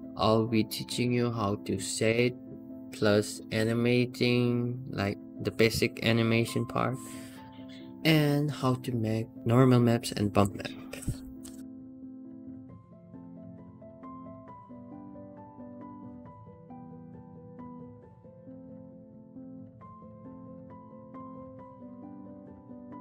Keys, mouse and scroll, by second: 0.2-0.6 scroll down 2, 0.6 scroll up 1, 1.6 click, 2.0 scroll up 2, 2.5 click, 3.0-4.1 scroll up 1, 4.3 Tab, 5.2 s, 8.6 s, 11.7-14.1 middle drag, 14.7 alt+middle click, 15.7 s, 22.1-23.0 middle drag.